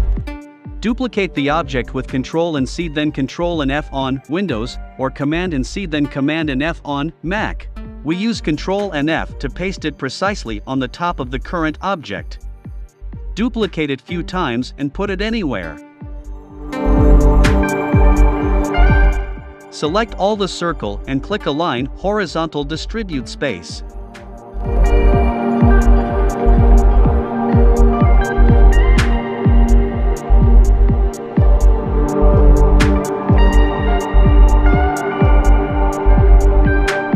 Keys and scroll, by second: 2.9 shift+Right, 4.2 shift+Right, 4.4 shift+Left, 5.0 shift+Right, 5.9 shift+Left, 6.5 shift+Right, 7.0 shift+Right, 8.9 super+c, 9.1 super+f, 9.5 shift+Right, 10.2 super+c, 10.4 super+f, 10.8 shift+Right, 11.5 super+c, 11.7 super+f, 12.1 shift+Right, 12.8 super+c, 12.9 super+f, 13.3 shift+Right, 14.1 shift+Right, 14.6 shift+Right.